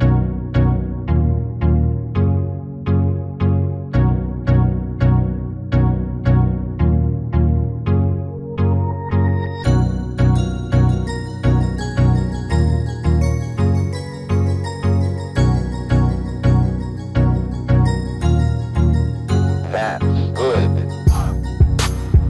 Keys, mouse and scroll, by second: 2.0 s, 4.7-8.6 middle drag, 8.4 s, 10.8-13.0 middle drag, 13.1 s, 16.3-18.4 middle drag, 21.6 Tab, 22.1-22.2 middle drag.